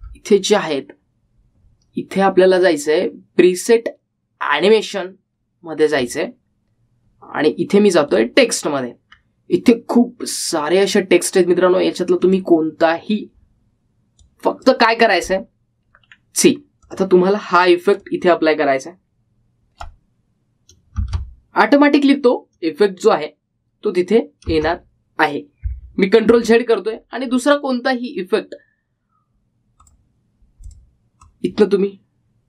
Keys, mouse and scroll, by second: 0.1-1.0 scroll down 1, 3.1 scroll up 1, 7.1 click, 10.1-11.2 scroll down 1, 13.4-17.3 drag, 17.3-18.0 scroll down 1, 18.0-22.2 drag, 22.2 space, 25.7 space, 27.5 ctrl+z, 28.0-30.9 scroll down 1, 31.0-32.4 drag.